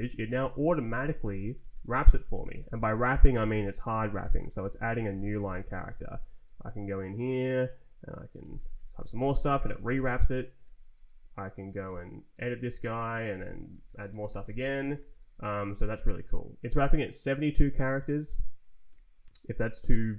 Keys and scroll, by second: 0.0-6.5 typing, 6.8 Right, 8.0-10.7 typing, 10.9 Return, 11.3 Right, 11.8 r, 12.3 Tab, 12.7 Up, 13.3 Left, 13.3-15.9 typing, 18.8 Escape.